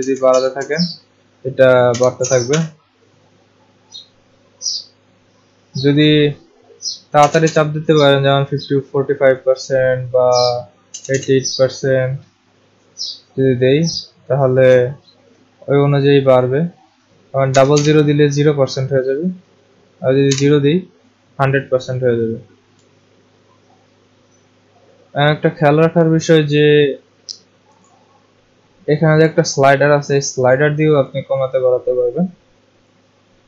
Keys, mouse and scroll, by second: 0.0-2.5 typing, 6.9-7.7 typing, 10.9 8, 11.1 8, 17.4 0, 17.7 0, 20.3 0, 27.9 click, 31.0 click, 32.9 click.